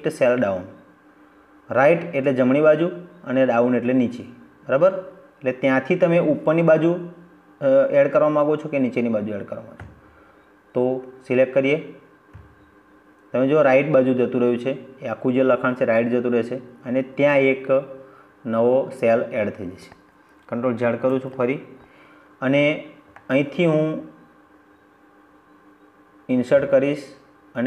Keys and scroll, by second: 19.9 ctrl+z.